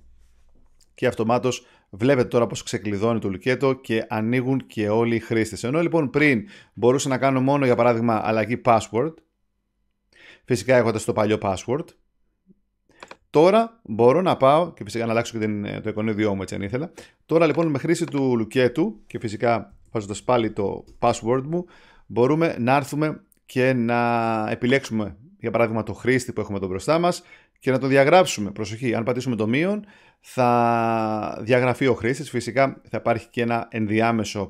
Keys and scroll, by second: 20.8 Return.